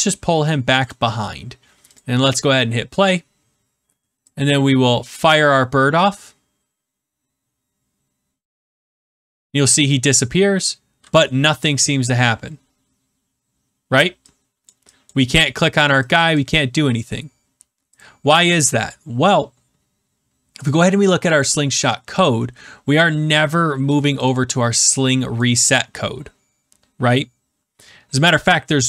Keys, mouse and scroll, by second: 0.7 shift+click, 5.1 click, 14.7 click, 15.0 click, 17.9 click, 20.6 click, 22.2 click, 23.8 click, 24.2 click, 25.3 click, 26.6 middle click, 26.7 middle click.